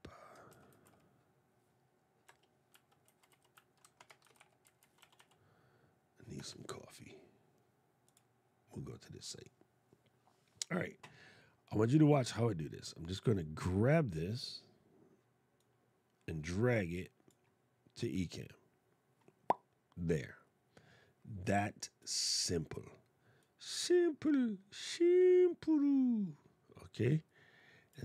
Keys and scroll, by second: 0.2 shift+m, 3.9 shift+c.